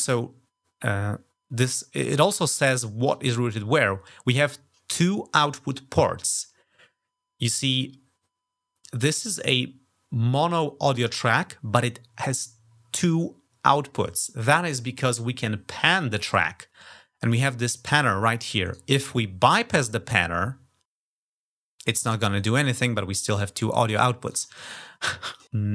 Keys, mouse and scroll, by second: 18.4 click, 19.2 click, 24.0 click, 25.1 click.